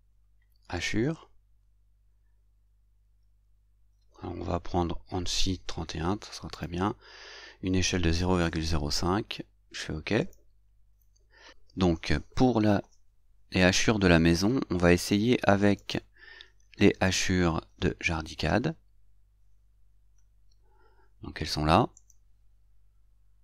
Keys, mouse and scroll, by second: 0.8 click, 10.2 click, 22.3 click.